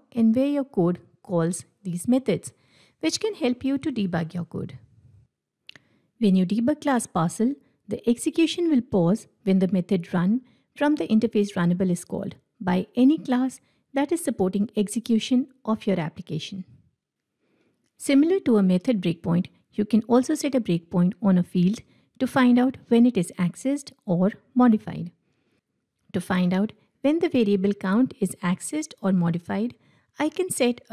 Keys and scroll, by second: 4.1 ctrl+Tab, 10.2 F8, 27.1 ctrl+F8.